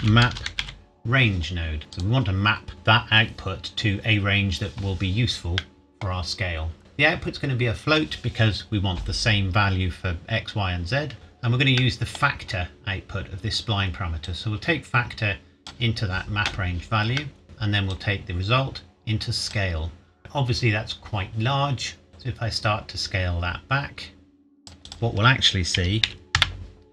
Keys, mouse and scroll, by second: 0.0-0.6 typing, 1.8 click, 5.6 middle click, 6.8-8.9 scroll up 1, 11.1-11.8 scroll up 1, 11.8 middle click, 12.5 scroll up 1, 14.2 click, 17.2 middle click, 17.4-17.9 scroll down 1, 17.9 click, 20.2-21.9 scroll up 1, 22.1 click, 25.7 KP_Decimal, 26.1 KP_1, 26.3 KP_Enter.